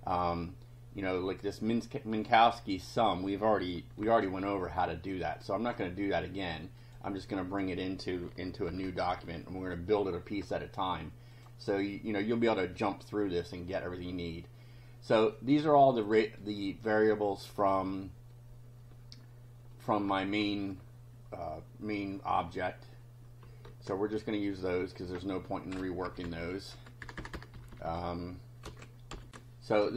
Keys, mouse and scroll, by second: 4.0 ctrl+c, 6.8 click, 7.5 click, 8.7 ctrl+v, 11.3 click, 15.3 click, 16.5 right click, 17.6 click, 23.8 alt+Tab, 26.1 Up, 26.8 Home, 27.0 Return, 27.6 Up, 28.6 ctrl+v, 29.1 ctrl+F5, 29.3 ctrl+r.